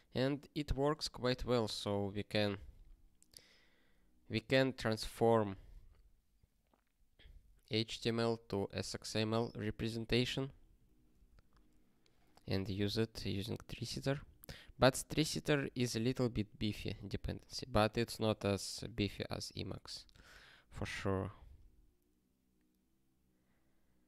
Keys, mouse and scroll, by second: 10.1 ctrl+n, 10.3 ctrl+n, 10.9 ctrl+s, 11.3 ctrl+p, 19.6 ctrl+p.